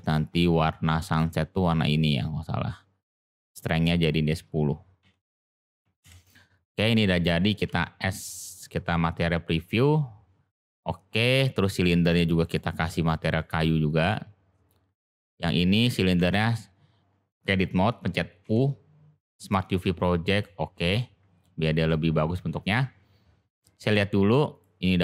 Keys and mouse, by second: 0.0 click, 2.7 click, 3.7-6.4 drag, 7.6 z, 11.1 click, 12.4-13.3 drag, 13.8 click, 15.0 click, 16.2 Tab, 18.4 u, 20.8 Tab, 23.4 click, 24.5 click.